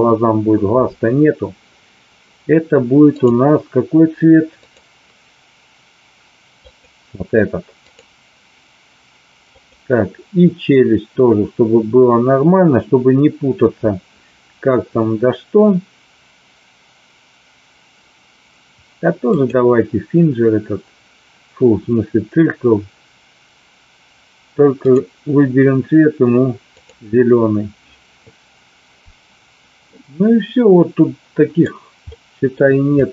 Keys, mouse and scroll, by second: 4.6-6.9 drag, 7.9 click, 9.5 click, 19.2 click, 24.9 click, 26.7 click, 29.9-31.6 middle drag, 32.1 middle click, 32.9 click.